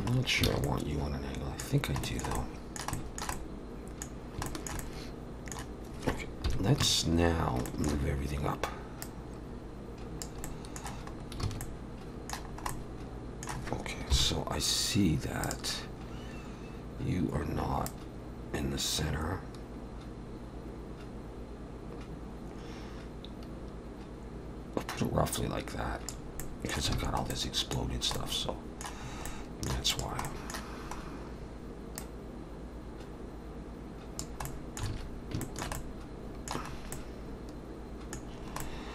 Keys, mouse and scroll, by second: 0.1-0.4 scroll down 2, 0.5 alt+a, 0.6 middle click, 1.7-2.0 scroll down 2, 2.0 shift+middle click, 2.4 middle click, 2.9 shift+middle click, 3.3 middle click, 4.2 scroll down 1, 4.5 shift+middle click, 4.8 middle click, 6.5 KP_1, 6.8 a, 7.7 shift+middle click, 9.0 click, 10.4 middle click, 11.1-11.5 scroll up 2, 11.4 alt+a, 11.6 middle click, 12.5 scroll up 1, 12.7 middle click, 14.1 KP_7, 15.4 click, 17.9 click, 26.4 middle click, 27.0 alt+a, 27.3 middle click, 27.9 scroll down 2, 28.2 middle click, 29.0-29.4 scroll up 3, 29.3 middle click, 29.9 click, 30.3 middle click, 31.0 scroll down 2, 32.0 click, 34.5 middle click, 34.9 alt+a, 35.4 shift+middle click, 35.8 middle click, 36.7-37.5 scroll up 2, 36.9 middle click, 38.3 scroll down 3, 38.6 middle click.